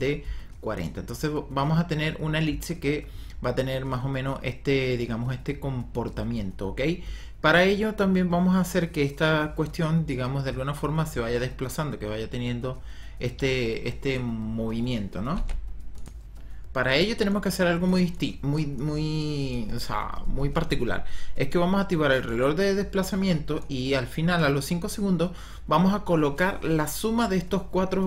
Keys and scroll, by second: 15.5 ctrl+z.